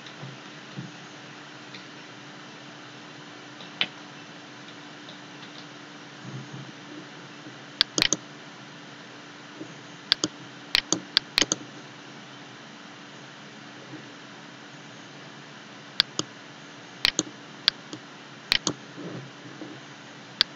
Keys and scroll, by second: 0.0-2.1 typing, 3.5-6.1 typing.